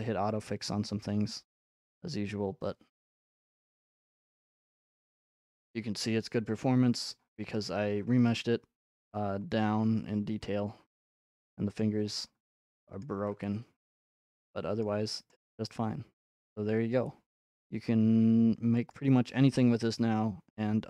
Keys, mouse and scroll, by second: 3.2 click, 5.1 click, 6.4-7.7 scroll, 8.9-9.4 scroll, 10.4 scroll, 11.8 click, 11.8-12.3 scroll, 12.9-13.4 scroll, 13.0 right click, 14.0-14.8 scroll, 14.8 right click, 14.8-15.3 scroll, 15.5-16.5 scroll, 16.5-17.0 scroll, 18.9 click, 19.8-20.5 scroll.